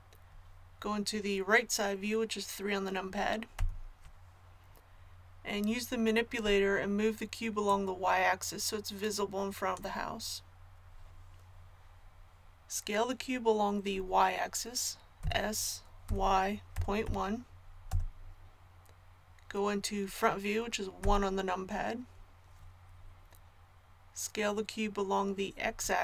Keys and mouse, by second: 3.5 KP_3, 7.6-15.2 drag, 15.2 s, 21.0 KP_1.